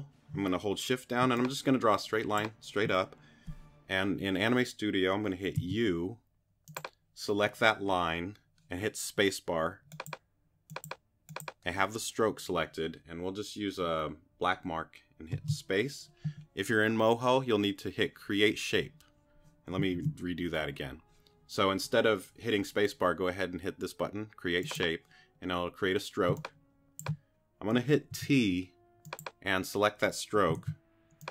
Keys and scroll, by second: 5.6 u, 15.3 space, 19.9 super+z, 26.3 space, 28.1 t, 30.6 super+z.